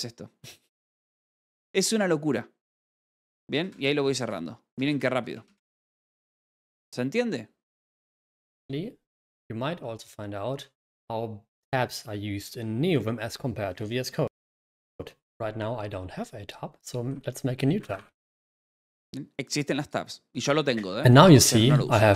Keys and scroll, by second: 1.6 \, 3.3-4.2 typing.